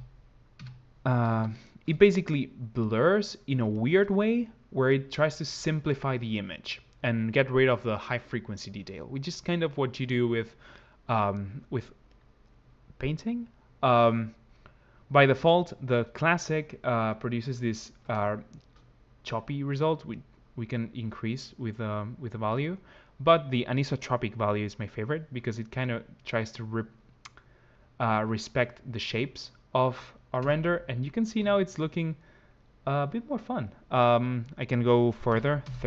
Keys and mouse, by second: 4.7 click, 11.9 click, 24.0 click, 30.3 KP_0, 35.4 click.